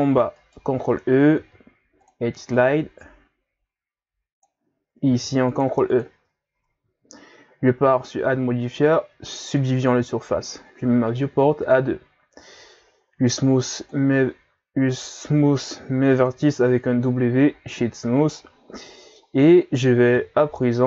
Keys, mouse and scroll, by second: 0.4 alt+right click, 1.4 ctrl+e, 5.1 ctrl+r, 6.6 Tab, 7.9-13.1 drag, 13.1 w, 15.3 w, 17.8-20.1 middle drag, 20.1 KP_3.